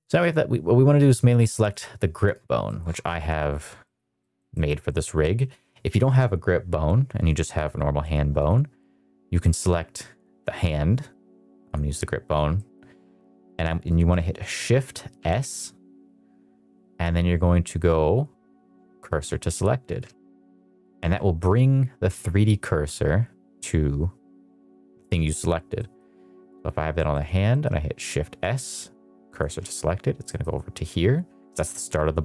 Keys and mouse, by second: 0.9 click, 2.1 KP_Decimal, 2.6 middle click, 3.0-3.3 middle drag, 3.7 middle drag, 4.1 middle drag, 4.4 middle drag, 4.8 middle click, 5.1 middle drag, 8.3 click, 11.6 click, 12.2 click, 12.5 middle drag, 15.1 shift+s, 25.7 middle click, 26.9 middle click, 27.1 click, 27.4 middle drag, 28.0 shift+s, 30.2 middle drag.